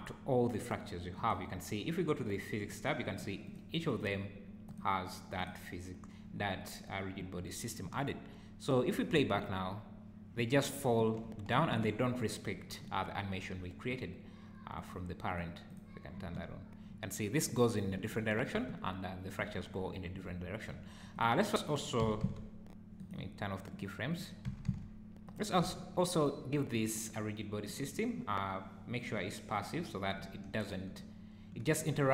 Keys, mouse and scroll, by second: 1.1 click, 2.6 click, 3.6 click, 4.0 click, 4.6 click, 5.4 click, 9.1 space, 11.6 Escape, 14.7 click, 15.3 click, 15.7 click, 16.1 space, 17.9 Escape, 18.5 space, 19.4 Escape, 20.7 `, 21.1 click, 22.0 s, 23.7 click, 24.1 click, 24.5 s, 25.7 `, 26.2 click, 27.7 click, 29.0 click, 30.2 `, 31.2 `.